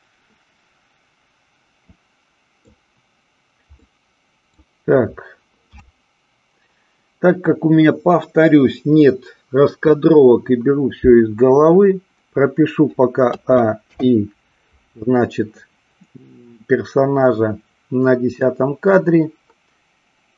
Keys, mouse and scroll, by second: 3.9 middle click, 13.9 i.